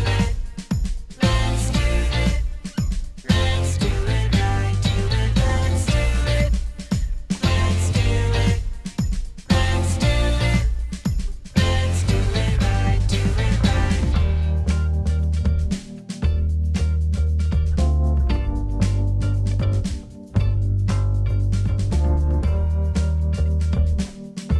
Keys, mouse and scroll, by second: 9.2 ctrl+z, 9.9 ctrl+z, 11.8 ctrl+z.